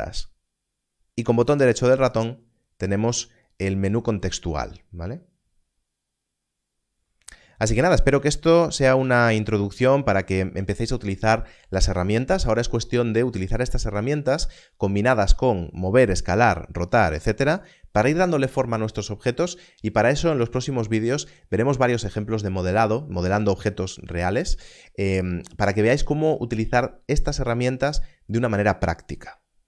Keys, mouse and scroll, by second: 1.4 right click, 17.6 click.